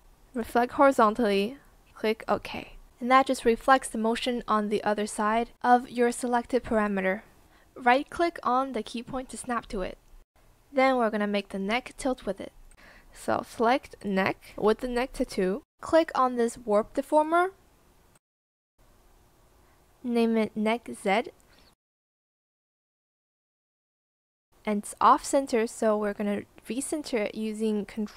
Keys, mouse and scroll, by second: 16.0 shift+click, 18.5 shift+click, 21.5-23.5 typing, 27.5 ctrl+click.